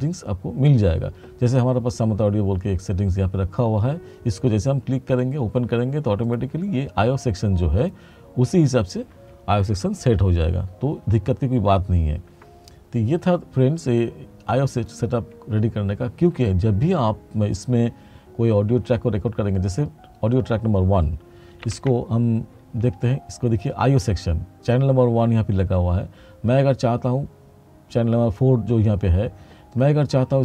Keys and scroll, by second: 21.7 ctrl+=.